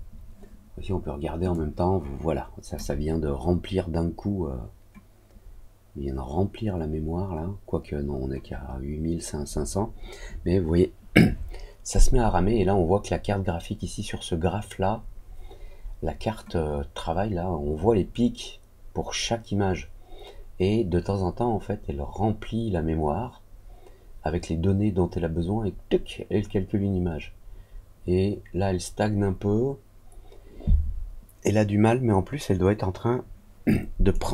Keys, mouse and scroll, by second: 34.0 right click.